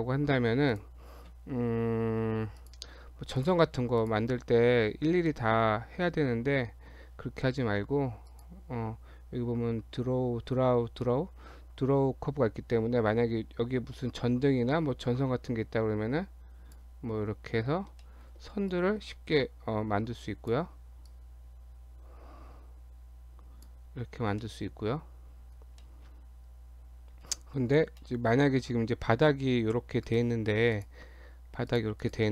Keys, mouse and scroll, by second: 0.7 click, 2.6 click, 3.4 click, 4.0 click, 5.2-5.6 shift+scroll up 1, 5.6 shift+middle click, 6.3 Tab, 8.3 click, 15.5 click, 17.6 scroll down 1, 18.0 shift+middle click, 18.7 click, 21.1 click, 24.4 middle click, 25.8 middle click, 28.0 middle click, 30.0 right click, 31.4 Tab, 31.7 click, 32.0 click.